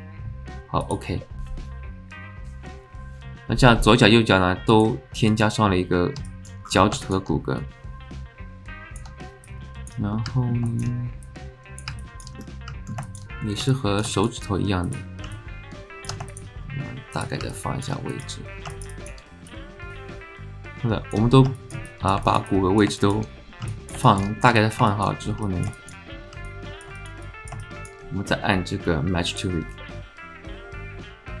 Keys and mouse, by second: 4.7 click, 6.2 alt+click, 7.0 alt+shift+click, 7.6 KP_0, 7.7-9.0 alt+drag, 9.6 click, 10.1 alt+middle click, 10.7 alt+shift+middle click, 11.3 click, 12.0 alt+middle click, 12.4 middle click, 13.1 shift+middle click, 13.7 alt+middle click, 14.1 alt+shift+middle click, 14.8 click, 15.3 alt+click, 17.5 click, 18.7 shift+middle click, 18.9 alt+middle click, 19.5 click, 19.9-21.2 alt+middle drag, 21.5 alt+shift+click, 21.9 click, 22.3 shift+click, 22.5 alt+click, 23.0 alt+shift+click, 23.7 alt+click, 24.1 alt+shift+click, 24.6 click, 24.9 alt+shift+click, 25.4 alt+click, 25.8 shift+click, 26.4 alt+click, 27.0 shift+click, 27.3 click, 27.6 alt+shift+click, 29.2-31.4 drag.